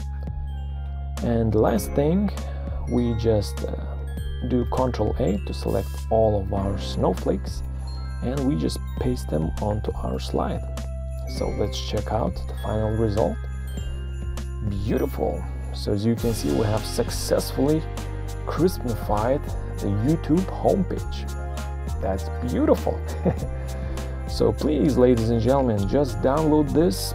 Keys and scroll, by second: 3.1 ctrl+scroll, 4.1 ctrl+scroll, 5.2 ctrl+a, 6.5 ctrl+c, 8.9 ctrl+v, 12.2 Print.